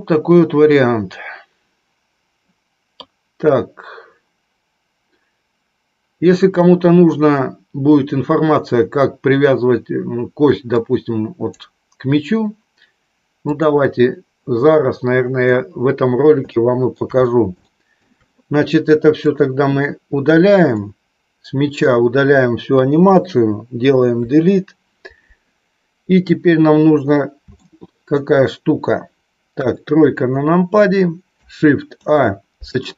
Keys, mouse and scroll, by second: 10.7 click, 13.5 click, 16.4 shift+middle click, 17.5 shift+middle click, 20.5-21.7 drag, 24.0 Delete, 27.4 shift+middle click, 29.4 KP_3, 31.8 shift+a.